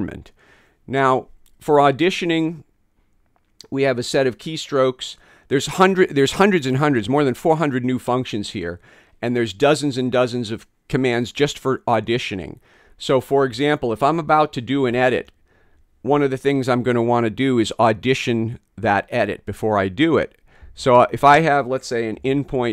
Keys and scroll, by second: 22.2 [.